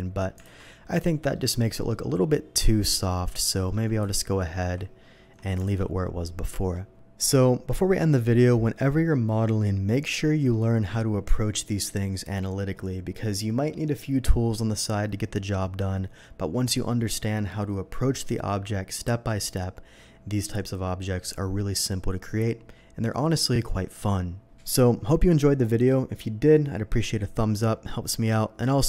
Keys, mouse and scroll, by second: 0.9 alt+v, 0.9 click, 1.3-1.8 middle drag, 3.0 middle click, 3.5 middle click, 4.0 ctrl+z, 4.5 ctrl+z, 5.6 alt+a, 6.9 n.